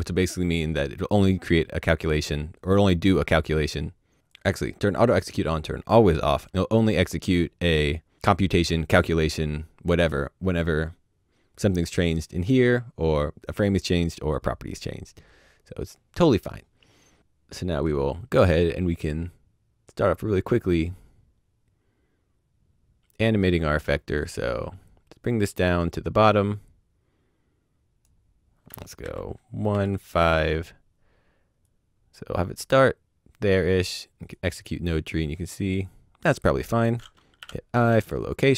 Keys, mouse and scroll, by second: 4.2 click, 17.6 click, 19.8 right click, 24.3 click, 29.0 KP_1, 29.6 KP_5, 31.6 KP_5, 34.0 click, 35.5 click, 38.0 click.